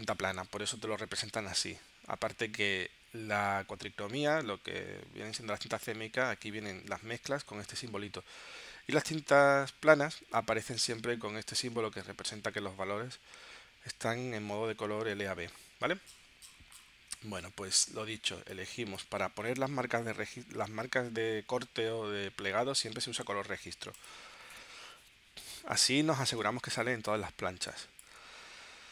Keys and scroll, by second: 26.5 space.